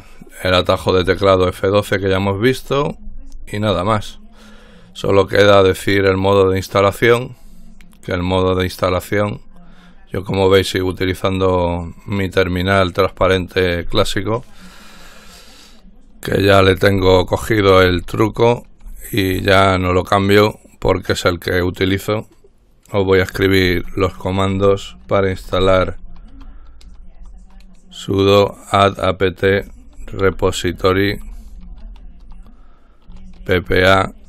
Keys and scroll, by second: 16.3-19.5 typing, 23.4-27.4 typing, 29.7-34.2 typing.